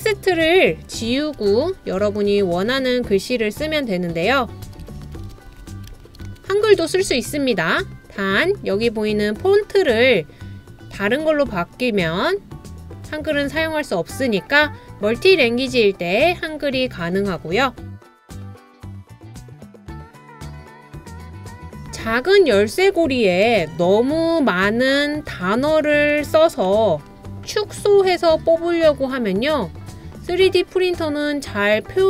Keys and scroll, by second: 1.1-3.2 typing, 4.6-6.8 typing, 17.9-22.2 typing, 23.2-24.0 typing, 25.1-25.8 typing.